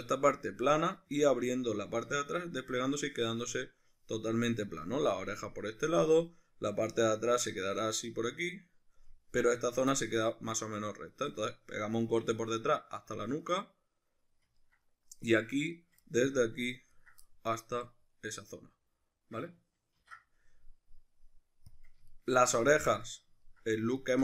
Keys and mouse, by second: 15.7 shift+right click, 16.0 middle click, 17.0 ctrl+right click, 17.2-20.0 middle drag, 20.0 ctrl+e, 22.1-24.0 shift+middle drag, 24.0 alt+right click.